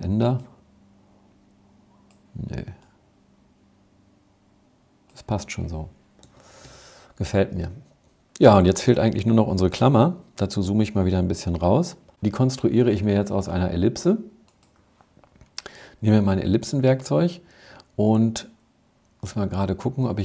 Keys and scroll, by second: 5.1 Escape, 5.7 Escape, 9.1 super+-, 9.5 super+-.